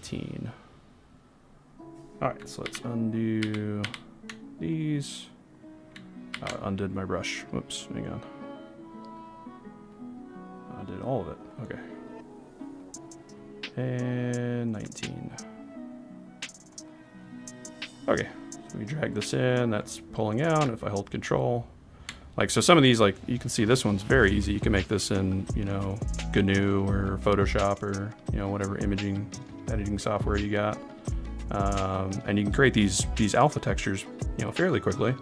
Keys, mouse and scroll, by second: 2.6 ctrl+z, 3.4 ctrl+z, 4.0 ctrl+z, 4.7 click, 6.5 ctrl+z, 7.9 click, 17.9 click, 20.9 ctrl+click.